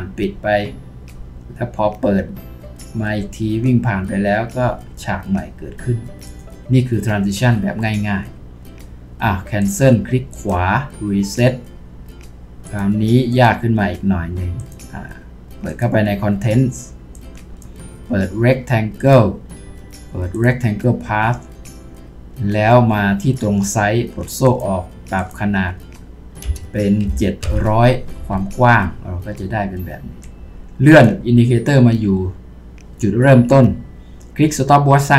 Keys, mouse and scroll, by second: 10.4 right click, 26.5-27.4 typing, 28.2 Return.